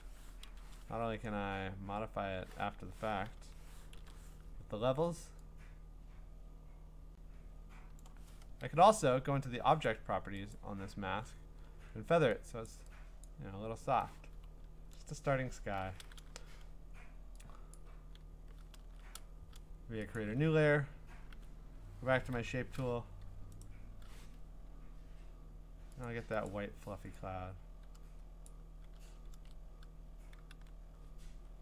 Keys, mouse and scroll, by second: 0.5 ctrl+i, 2.7 Escape, 3.9 ctrl+i, 8.0 click, 8.5 Return, 9.8 click, 10.5 click, 12.7 click, 13.2 click, 14.4-15.4 scroll, 17.7 click, 18.8 ctrl+z, 20.1 click, 21.3 g, 22.3 u, 23.6 right click, 26.0 click, 26.5 click, 28.4 click, 29.3 ctrl+z, 30.5 d.